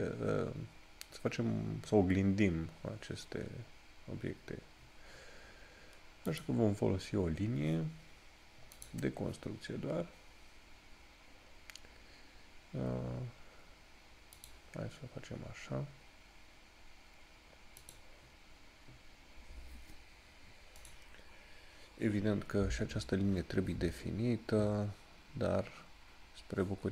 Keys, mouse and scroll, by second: 6.5 click, 14.7 click.